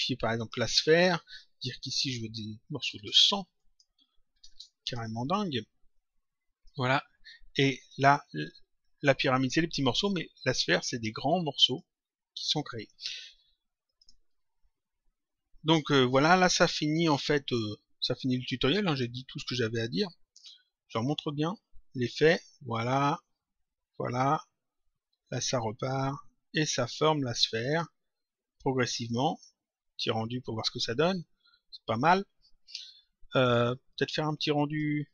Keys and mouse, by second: 0.3 click, 1.7 click, 3.5 click, 4.8 click, 5.9 click, 7.8 click, 11.5 click, 13.8 click, 16.8 click, 18.8 click, 20.3 click, 27.5 click, 28.9 click, 33.6 click.